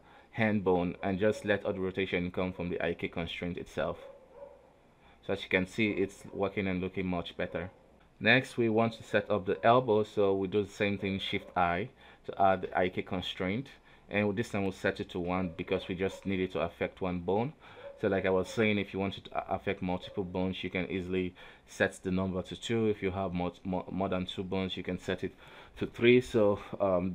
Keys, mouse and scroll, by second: 0.0 g, 4.4 right click, 5.4 click, 5.9 a, 6.2 alt+r, 6.5 alt+g, 7.2 right click, 7.3 g, 7.9 a, 8.2 alt+r, 8.5 alt+g, 9.1 right click, 9.3 middle click, 9.8 g, 10.8-11.4 middle drag, 11.4 shift+right click, 12.0 shift+i, 13.2 click, 14.3 click, 14.8 KP_3, 15.6 right click, 17.1-17.5 scroll down 1, 17.6 alt+a, 18.3 right click, 18.4 scroll down 1, 18.5 middle click, 18.9 g, 21.2 a, 21.5 alt+r, 21.7 alt+g, 22.0-22.7 middle drag, 22.7 right click, 23.0 middle click, 24.0 click, 24.7-25.8 middle drag, 25.8 click, 26.5 click.